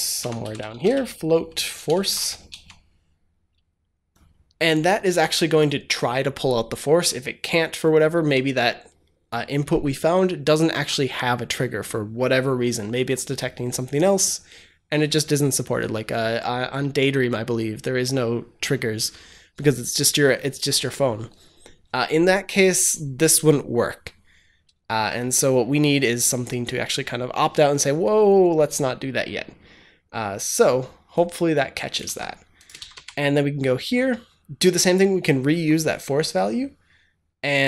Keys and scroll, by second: 0.0-2.5 typing, 31.9 ctrl+c, 32.7 ctrl+v, 32.8 ctrl+s.